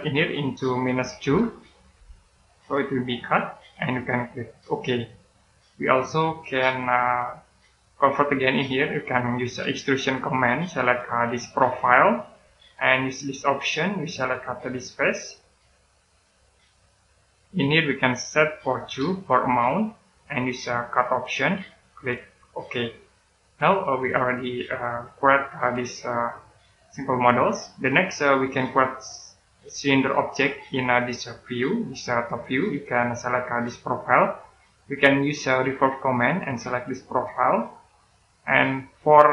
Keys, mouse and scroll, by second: 0.4 click, 1.8 -, 2.4 click, 5.6 right click, 9.8 click, 19.2 2, 19.9 click, 22.5 click, 23.6 right click, 29.6 middle click, 35.9 click.